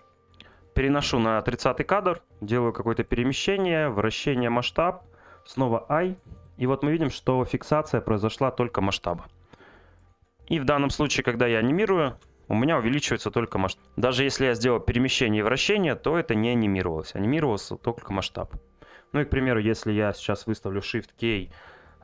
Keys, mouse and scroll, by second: 0.9 click, 3.0-6.5 drag, 9.6 click, 12.7 click, 14.5 click, 15.1 click, 15.5 click.